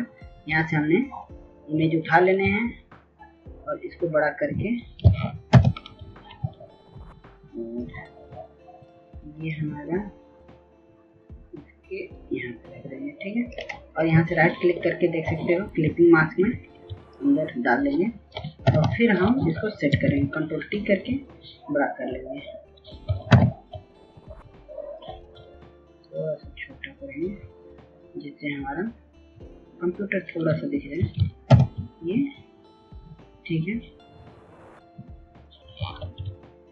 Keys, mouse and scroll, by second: 0.0 click, 6.8 shift+click, 9.0 Return, 10.6-16.4 drag, 17.4 right click, 19.3 ctrl+s, 20.1 ctrl+s, 20.6 click, 23.5 ctrl+t, 24.6 shift+click, 27.8 click, 28.7 click, 29.6-34.7 shift+drag, 35.1 Return.